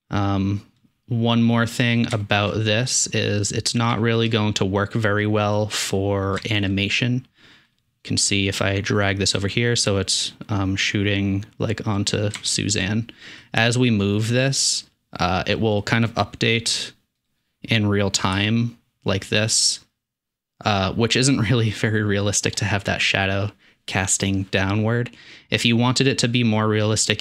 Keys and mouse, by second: 0.2 middle click, 1.6-1.9 middle drag, 2.1-2.6 shift+middle drag, 2.4 shift+click, 2.6 click, 3.1-3.4 middle drag, 3.9-4.3 shift+middle drag, 4.9 middle click, 5.1-5.6 middle drag, 6.0-6.7 middle drag, 7.8-8.6 drag, 12.4-12.8 shift+middle drag, 13.8-17.3 drag, 18.4 g.